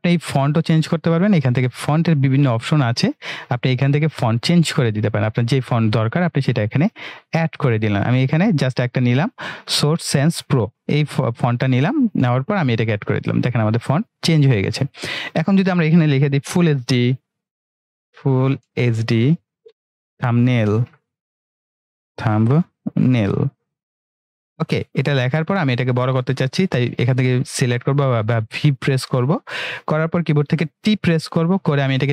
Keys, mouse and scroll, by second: 1.7 click, 7.3 click, 10.8-15.0 drag, 17.9-24.5 typing, 26.9-29.7 drag, 30.7 ctrl+t, 31.8-32.1 click.